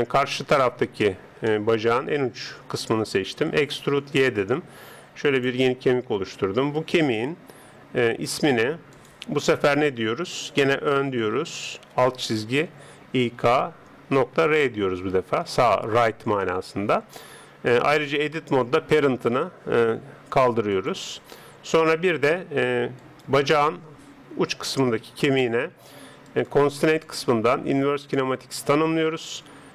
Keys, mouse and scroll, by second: 1.1-3.6 middle drag, 3.6 e, 6.1 Tab, 6.7 right click, 8.3-10.8 drag, 18.1 Tab, 20.7 click, 22.3 Tab, 23.0 right click, 26.3-28.8 drag.